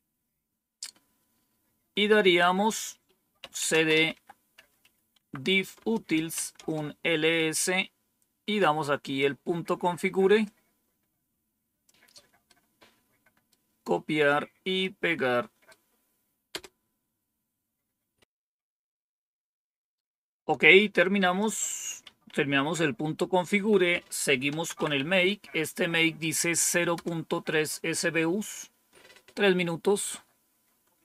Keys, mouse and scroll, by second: 3.1-6.8 typing, 10.3-11.8 drag, 12.4-13.4 right drag, 14.7 right click, 16.4 Return, 21.3 click, 22.0 Up, 23.4 Down, 24.2-25.4 typing, 26.9 Return.